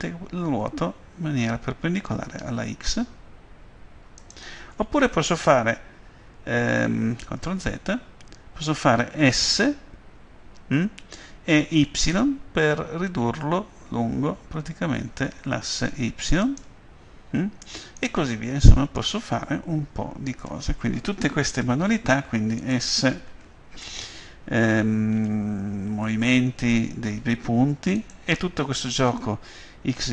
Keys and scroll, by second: 7.6 ctrl+z, 9.4 s, 11.9 y.